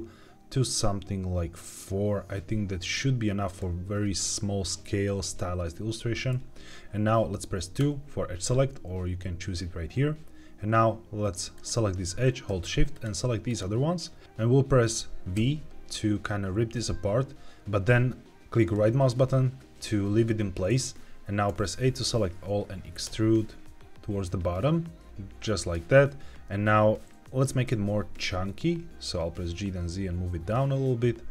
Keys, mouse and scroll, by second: 3.4 right click, 11.5-14.2 drag, 18.6-21.4 right drag, 21.4 a, 25.5 click, 27.4 g, 27.6 z.